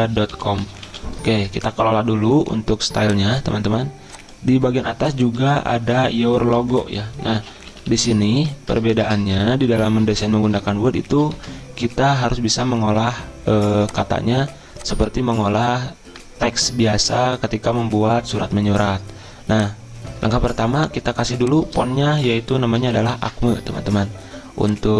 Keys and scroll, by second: 0.1-3.1 typing, 5.4 Return, 6.8 Up, 7.4-10.7 typing, 11.4 ctrl+a, 12.4-13.2 typing, 20.3 ctrl+a, 22.3-22.8 typing, 23.6 Return.